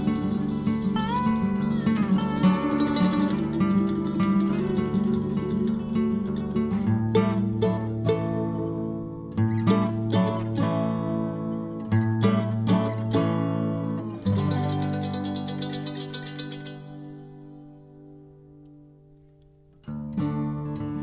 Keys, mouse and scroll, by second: 0.0 click, 1.9 click, 3.1 click, 4.0-5.4 drag, 5.4-5.9 scroll down 2, 5.9-7.7 drag, 7.7-9.0 scroll down 11, 9.0 click, 9.3-9.9 scroll down 4, 10.4-11.3 scroll down 6, 11.7-14.3 scroll down 38, 14.3-16.5 drag, 16.5-18.0 scroll up 3, 18.0 click, 19.0 KP_1.